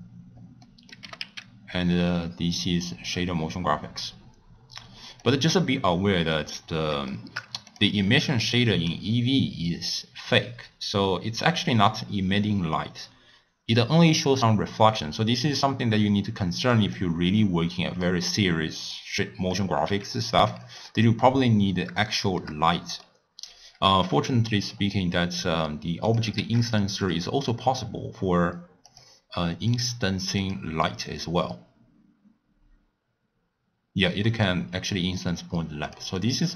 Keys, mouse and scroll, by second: 0.6 middle click, 1.0 g, 5.6 middle click, 6.5-7.1 scroll up 2, 7.1-7.6 shift+middle drag, 7.6 click, 11.9-14.9 middle drag, 16.7 click, 17.6-18.9 middle drag, 18.9 click, 19.8 g, 20.8 click, 22.0-24.0 shift+middle drag, 24.0 scroll down 2, 24.3 scroll up 1, 24.4-24.7 scroll down 3, 24.7-26.0 scroll up 4, 26.0 click, 26.5 shift+d, 28.8 click, 29.9 click, 30.4-33.4 drag, 36.1 click.